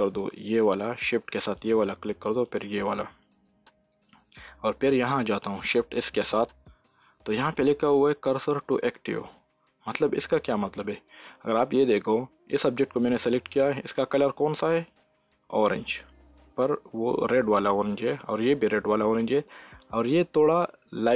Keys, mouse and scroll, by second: 3.4-5.8 middle drag, 5.8 shift+s, 9.1 shift+s, 14.8 s.